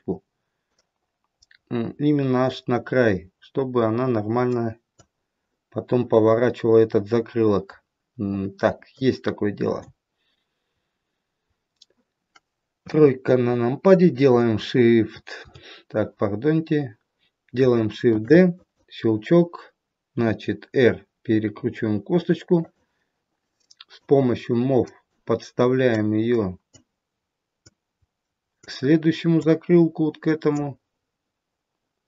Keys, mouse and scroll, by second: 0.6 click, 7.3-8.3 scroll down 3, 8.9 shift+middle click, 12.9 KP_3.